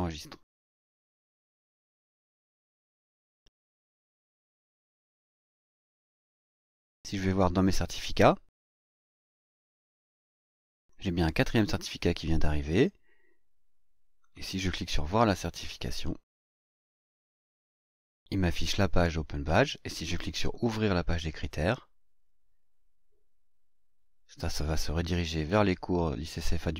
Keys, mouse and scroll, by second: 0.4 click, 3.3-4.0 scroll down 2, 4.3-7.6 scroll down 4, 7.6-7.9 scroll down 1, 8.1-8.4 scroll down 2, 9.3-9.6 scroll down 2, 10.8 click, 14.2 click, 20.3 click, 25.0-26.7 scroll up 1.